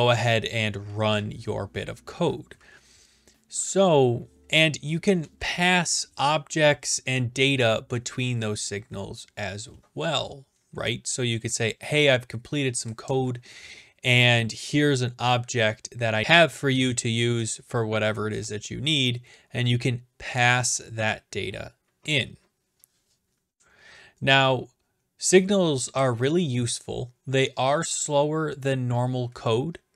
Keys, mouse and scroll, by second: 4.4-6.1 scroll, 25.2-26.5 scroll.